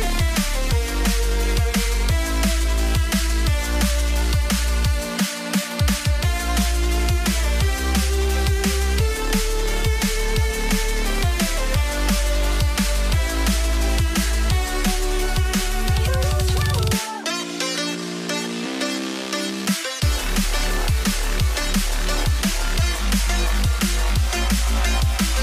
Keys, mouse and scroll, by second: 4.7 v, 5.4 alt+click, 6.2 v, 12.4 alt+click, 21.5 ctrl+ت.